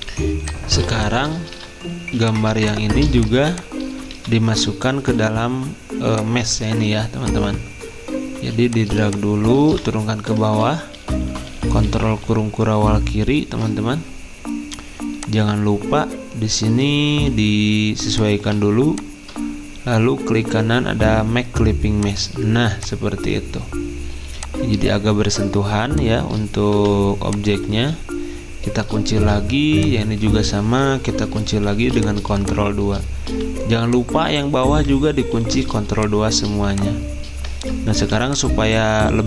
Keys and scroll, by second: 0.8 space, 2.4-4.1 typing, 5.0 ctrl+z, 6.7 ctrl+z, 8.1-9.6 typing, 10.6 ctrl+[, 10.9 ctrl+[, 11.1 ctrl+[, 27.7 ctrl+z, 29.2 ctrl+2, 30.3 ctrl+z, 31.8 z, 33.0-33.8 typing, 35.4 ctrl+2.